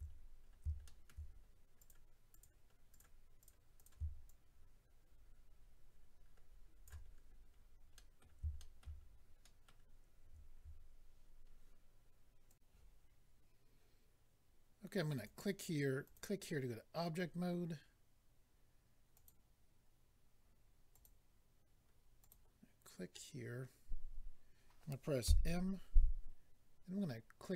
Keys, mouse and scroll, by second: 0.1-0.8 scroll up 5, 0.8 shift+middle click, 1.3-1.6 scroll up 2, 1.8 click, 1.9 click, 2.3 click, 2.4 double click, 2.9 double click, 3.0 double click, 3.4 double click, 3.5 double click, 3.7 double click, 3.8 double click, 4.2 shift+click, 7.0-7.5 scroll down 2, 7.9 middle click, 7.9 scroll down 4, 8.5 shift+middle click, 8.8 middle click, 9.0-9.4 scroll up 2, 9.4 middle click, 12.5 click, 12.5 click, 15.1 click, 15.2 click, 16.0 click, 19.1 click, 20.9 click, 22.2 click.